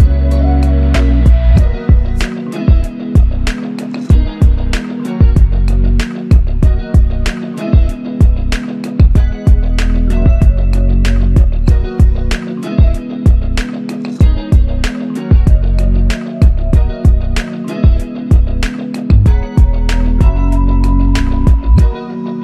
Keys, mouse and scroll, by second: 8.2 double click, 17.6 alt+click.